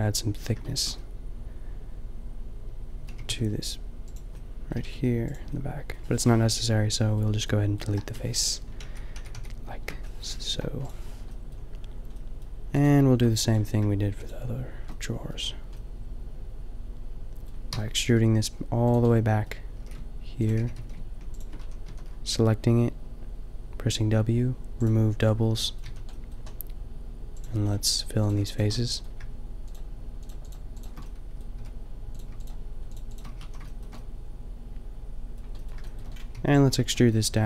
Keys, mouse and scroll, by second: 2.5 middle click, 3.1 g, 4.3 middle click, 4.8 g, 7.8 Delete, 8.7 ctrl+z, 10.5 Delete, 14.5 middle click, 14.9-17.0 drag, 17.7 e, 17.9 click, 18.4 g, 19.8-22.1 typing, 20.9 middle click, 25.9 a, 27.6 click, 28.7-31.0 middle drag, 31.5 f, 33.3 f, 33.4 a, 36.3 b.